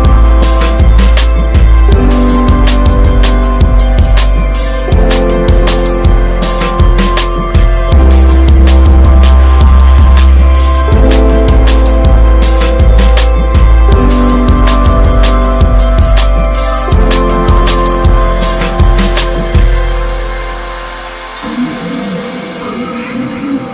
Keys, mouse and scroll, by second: 0.5 scroll down 4, 0.7-2.7 shift+middle drag, 2.7 w, 5.8 scroll down 1, 6.0-7.4 shift+middle drag, 7.4-8.5 drag, 9.3 s, 14.4 shift+middle click, 15.0 e, 18.0 scroll down 4, 18.3 shift+middle click, 18.5 scroll up 1, 18.9 Tab, 19.2 click, 19.3 ctrl+a, 19.9 Tab, 20.3 middle click, 20.6-21.1 scroll up 1, 21.3 2, 22.0 click, 22.6 click, 23.4 alt+shift+click.